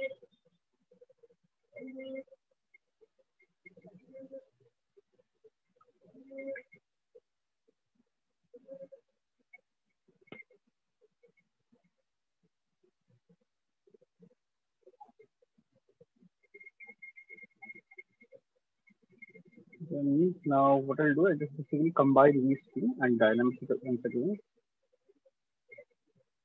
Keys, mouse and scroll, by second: 0.1 click, 1.1 shift+click, 2.2 click, 3.1 shift+click, 4.1 alt+click, 6.1 right click, 8.1 click, 9.1 alt+click, 10.1 alt+click, 12.1 click, 13.1 click, 14.1 click, 17.1 shift+click, 26.1 click.